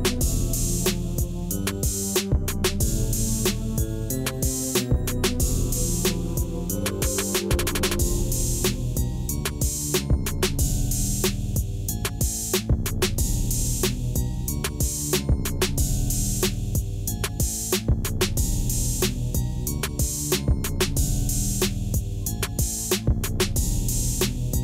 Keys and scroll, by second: 0.0 Tab, 1.3 ctrl+1, 3.5 ctrl+2, 3.9 Tab, 4.8 3, 6.3 shift+z, 7.5 i, 8.5 shift+z, 9.6 i, 10.5 Tab, 13.3 alt+a.